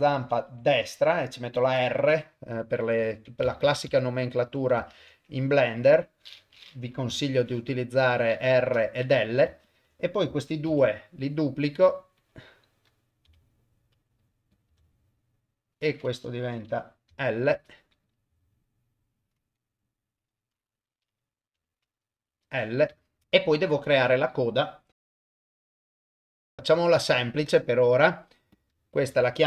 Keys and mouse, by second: 3.0 F2, 4.3 click, 4.5 F2, 9.3 click, 9.7 shift+click, 10.7 shift+d, 12.2 click, 13.3 g, 14.5 click, 14.7 F2, 18.0 click, 18.3 F2, 23.1 shift+middle click, 23.2 click, 23.2 shift+middle click, 25.0 shift+right click, 25.5 click, 25.6 shift+right click, 25.9 shift+a, 26.1 click, 26.4 g, 28.5 click, 29.0 F2.